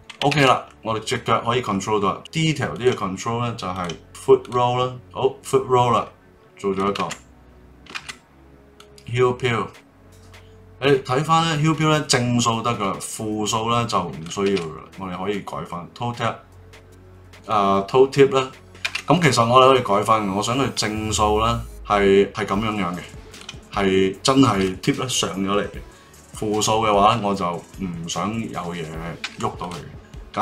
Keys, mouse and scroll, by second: 0.3 ctrl+z, 0.7-2.1 middle drag, 2.1 click, 2.7 click, 3.7 click, 4.9-6.7 drag, 7.9 ctrl+z, 8.7-11.8 drag, 14.4 ctrl+z, 15.3-17.1 drag, 17.1 ctrl+z, 17.5-18.6 drag, 18.8 ctrl+z, 20.6-22.0 drag, 29.2 ctrl+z, 29.6 click.